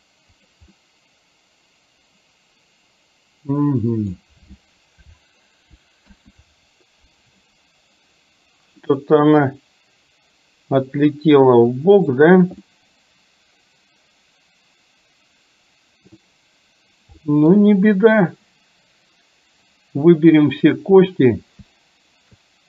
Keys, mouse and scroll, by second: 0.9-4.3 middle drag, 6.1 KP_1, 9.0-12.1 middle drag, 12.8-16.3 middle drag, 17.4 middle click, 19.9-20.6 drag.